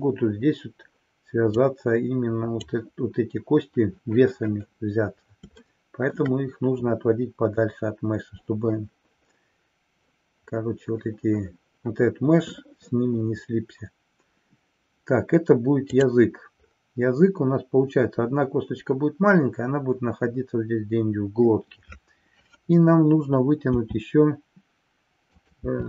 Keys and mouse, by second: 1.6 click, 5.6 shift+middle click, 25.4 click, 25.6 e.